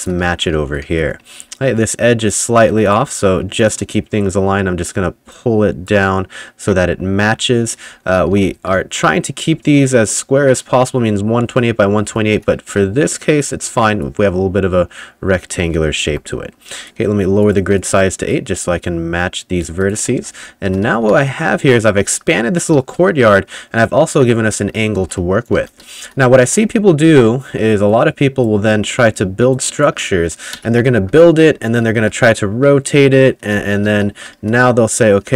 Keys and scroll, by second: 0.0-2.7 typing, 7.7-9.6 typing, 11.9-13.7 typing, 16.1 [, 19.8-23.3 typing, 24.5-28.0 typing, 30.6-35.3 typing.